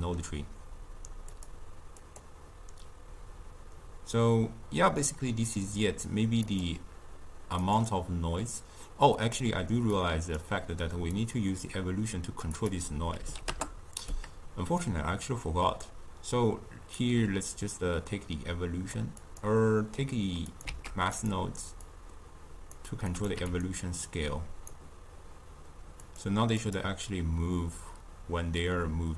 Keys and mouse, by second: 1.2-5.0 drag, 6.5 click, 7.6 click, 9.2 click, 11.1-19.4 drag, 20.5 click, 20.7 shift+d, 21.8-23.6 drag, 24.0-24.8 drag, 26.0-29.1 drag.